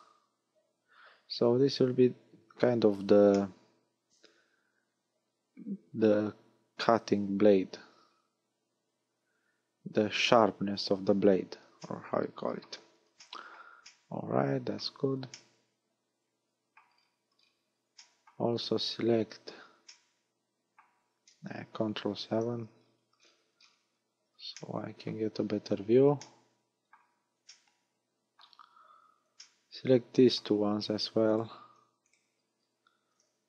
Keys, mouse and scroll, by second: 1.7 scroll down 3, 3.3 middle click, 7.3-8.0 scroll up 2, 8.0-8.5 scroll up 1, 8.5-9.6 scroll up 1, 11.8 middle click, 12.8-13.4 scroll down 4, 13.2 shift+middle click, 13.9 shift+middle click, 15.3 shift+middle click, 16.9-18.0 scroll down 9, 18.0 shift+middle click, 18.6-19.5 scroll up 12, 19.9 middle click, 22.1 ctrl+KP_7, 22.8-24.2 scroll down 19, 24.6 shift+middle click, 25.4-26.0 scroll up 9, 26.2 shift+middle click, 27.5 shift+middle click, 28.6 scroll up 5, 29.4 shift+middle click, 31.3 right click, 32.1 shift+right click, 32.6 scroll up 1.